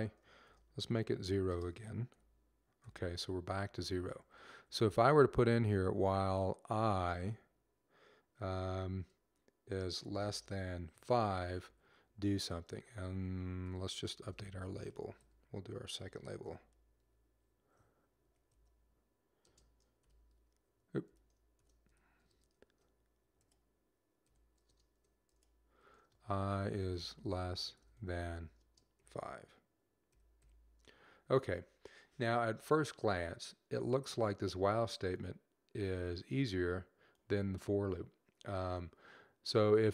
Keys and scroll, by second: 1.4 typing, 2.5-3.3 typing, 3.3 Down, 3.9 Right, 4.0 Right, 4.2 Right, 4.4 Right, 6.9 i, 8.8-11.8 typing, 14.6-16.8 typing, 18.1 typing, 26.6-28.9 typing, 30.0 typing.